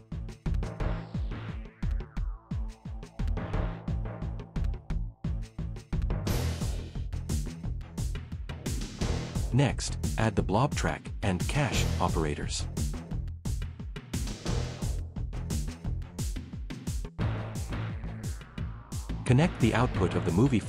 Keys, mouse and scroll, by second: 0.0-1.9 typing, 3.4-6.0 typing, 5.0 Left, 6.3 Return, 6.6 Left, 7.4-8.0 scroll, 8.5 BackSpace, 9.0 Return, 9.6 scroll, 10.0 right click, 11.4-13.0 typing, 13.4 click, 15.9 click.